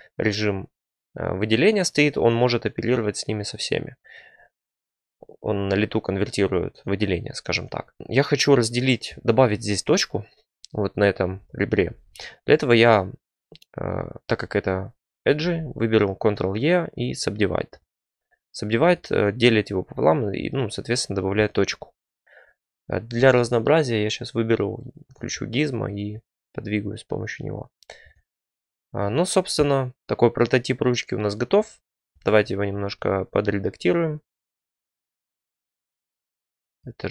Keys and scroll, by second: 11.0 2, 15.3 ctrl+e, 18.6 1, 23.1 t.